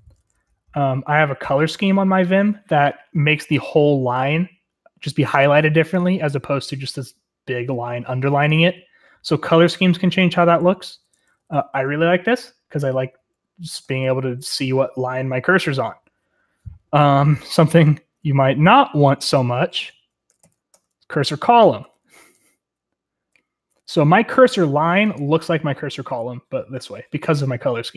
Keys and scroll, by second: 0.0-2.0 typing, 10.7-14.7 typing, 17.3-19.9 typing, 20.2 ctrl+r, 20.4 ctrl+l, 20.7 Return, 20.9-24.1 typing.